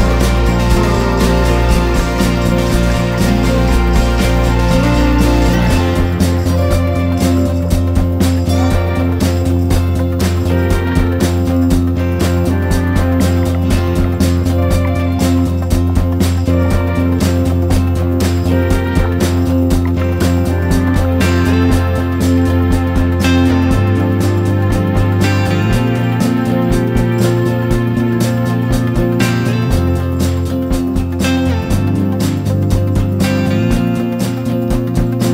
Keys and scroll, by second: 4.1-6.5 typing, 4.7 ctrl+-, 8.7 ctrl+=, 15.8 ctrl+-, 17.0-17.6 typing, 17.1 ctrl+-, 17.9 ctrl+s, 19.8 ctrl+v, 21.4-22.0 typing, 22.2 Return.